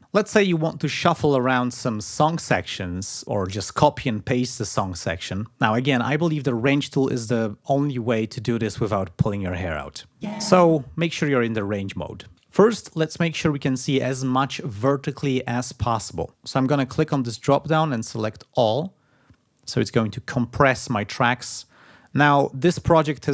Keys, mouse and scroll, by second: 22.6-23.3 scroll down 7.